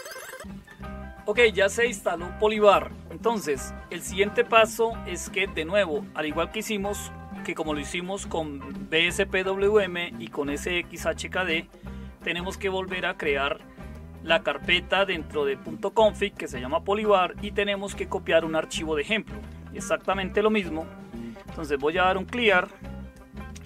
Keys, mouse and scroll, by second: 20.0 typing, 21.1-23.6 typing.